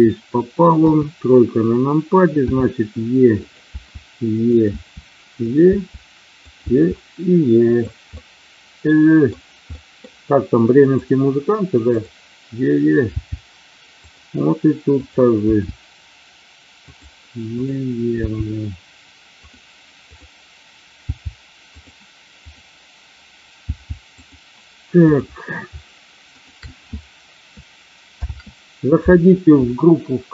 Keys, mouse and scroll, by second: 0.8 KP_3, 2.5 e, 3.3 click, 3.8 e, 4.4 click, 4.7 e, 5.4 click, 5.5 e, 6.4 click, 6.5 e, 7.6 click, 8.0-9.3 middle drag, 9.7 middle click, 11.0 click, 13.1 g, 14.0 click, 15.0 click, 15.8 g, 16.8 click, 17.7 click, 18.4 g, 19.4 click, 20.0 click, 20.9 g, 21.8 click, 22.4 click, 23.5 g, 24.1 click, 25.0 click, 26.3 shift+click, 28.2 ctrl+p.